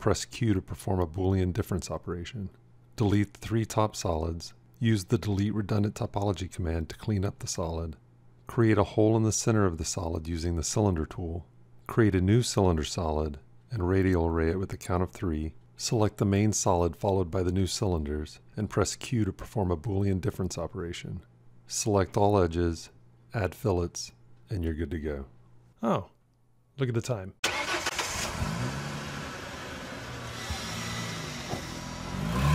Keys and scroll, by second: 17.4 q.